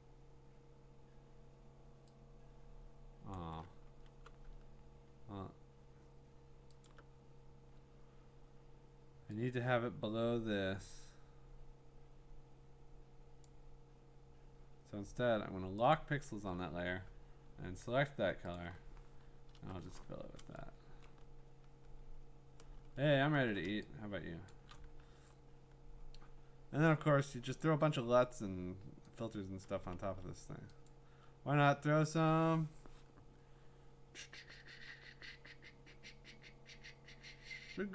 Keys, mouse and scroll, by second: 3.3 click, 4.1 b, 6.8 alt+click, 8.0-10.0 scroll, 13.4 click, 15.9 click, 18.5 alt+click, 19.4 alt+BackSpace, 20.6-21.2 ctrl+scroll, 21.7-22.1 scroll, 22.8-23.5 scroll, 24.5 click, 25.3-27.5 scroll, 27.6 click, 29.2 click, 30.0 ctrl+z, 30.9 click.